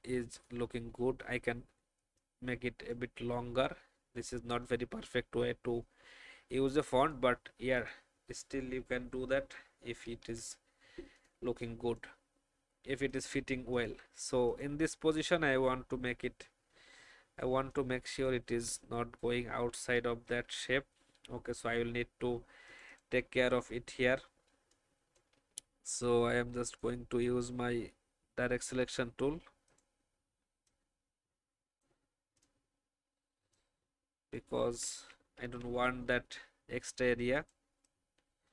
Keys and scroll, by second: 4.3 Up, 4.6 Up, 4.8 Up, 5.0 Up, 5.3 Left, 5.6 Left, 10.0 ctrl+2, 20.3 ctrl+z, 24.6 alt+space, 25.4 alt+a, 35.4 ctrl+z.